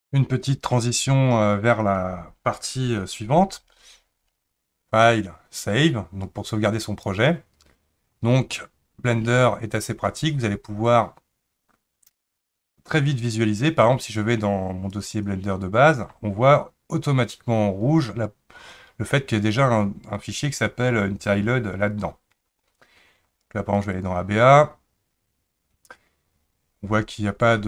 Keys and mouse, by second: 5.1-7.1 drag.